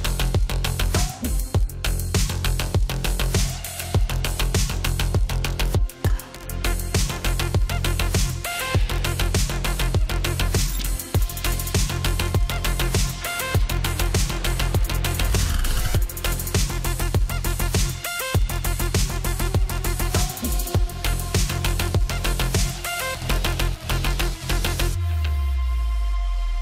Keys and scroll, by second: 25.5-26.6 typing.